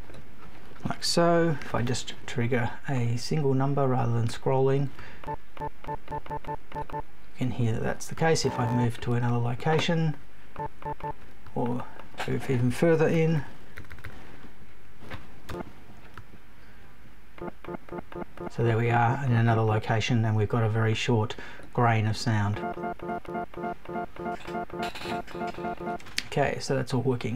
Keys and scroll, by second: 15.5 Return, 16.1 super+Return.